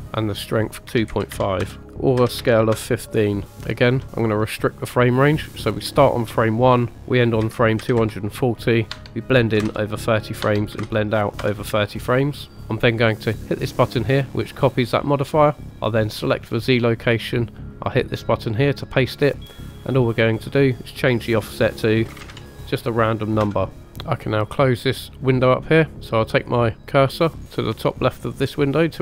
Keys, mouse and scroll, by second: 0.8 click, 1.8-2.9 drag, 4.5 click, 5.5 click, 8.8 click, 13.9 click, 16.1 click, 18.2 click, 20.3 click, 23.3 click.